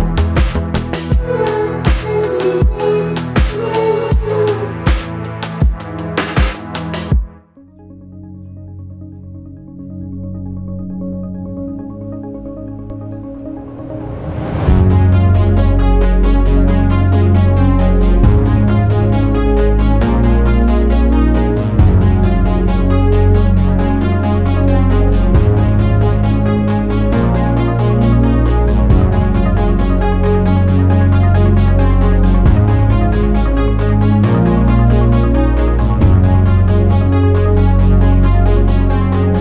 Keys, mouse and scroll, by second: 2.6 click, 4.3 click, 5.9 click, 7.0-8.9 drag, 9.3-9.7 drag, 10.0 click, 11.1 click, 11.7 click, 12.1 click, 12.8 click, 14.7 scroll down 2, 15.6-17.1 drag, 17.5-17.8 scroll up 2, 20.5 click, 23.3 right click, 24.1 click, 30.0 scroll up 2, 35.7 click, 37.8 scroll up 2, 38.0-39.4 scroll down 8.